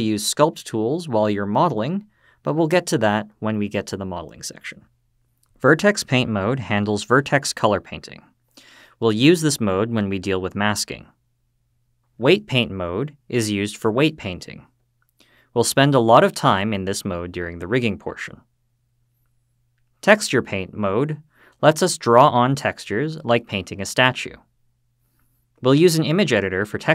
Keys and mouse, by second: 4.6-5.8 drag, 9.8-12.1 drag, 18.9-19.9 drag.